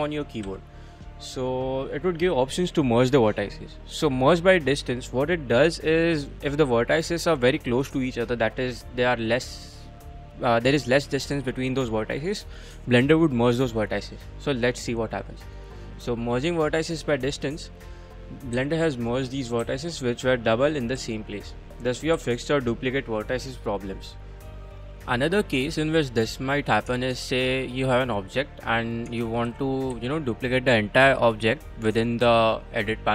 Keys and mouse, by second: 0.4 m, 16.9 click, 17.1 middle click, 18.1 click, 18.6 g, 19.0 click, 19.4 click, 19.6 g, 20.4 click, 20.8 click, 21.0 g, 21.5 click, 21.9 click, 22.2 g, 23.5 click, 24.3 click, 24.4 click, 26.9 Tab, 28.0 middle click, 28.2-28.8 middle drag, 29.1 Tab, 29.4 a, 29.9 a, 30.2-31.6 middle drag, 31.6 click.